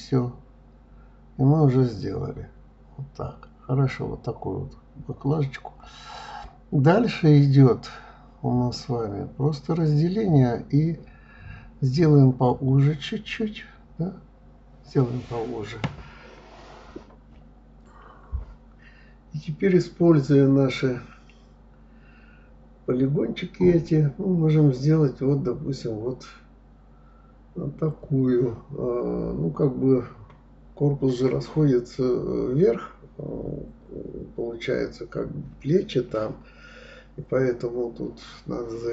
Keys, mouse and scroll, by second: 0.0 s, 1.8 click, 2.0-3.5 middle drag, 4.5 click, 5.2-6.8 middle drag, 9.2 s, 11.5 click, 11.7-13.2 middle drag, 13.3-14.8 middle drag, 16.5 click, 17.6-18.8 drag, 19.1 shift+click, 19.4 shift+click, 19.7 shift+click, 19.9 shift+click, 20.3 shift+click, 20.4 shift+click, 20.7 shift+click, 20.9 shift+click, 21.3-22.6 middle drag, 22.6 r, 27.6 s, 31.0-32.7 middle drag, 32.7 click, 32.9-34.4 middle drag, 34.9 click, 35.2 shift+click, 35.4 shift+click, 35.8 shift+click, 36.0 shift+click, 36.4 shift+click, 36.7 shift+click, 37.0 shift+click, 37.4 shift+click, 37.7 shift+click, 38.0-38.9 middle drag.